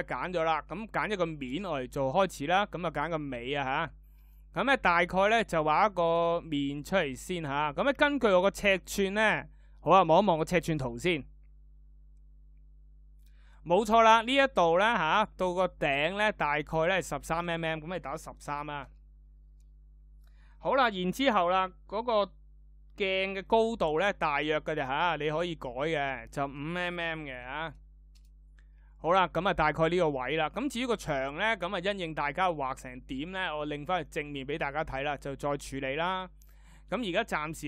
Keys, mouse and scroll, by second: 13.4 d.